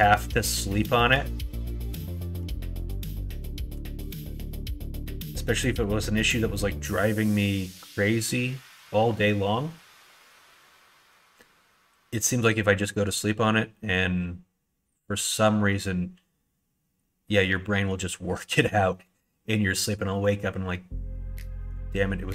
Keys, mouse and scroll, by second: 0.7 shift+click, 2.9 ctrl+click, 3.7 KP_1, 4.0 KP_3, 5.9 shift+middle click.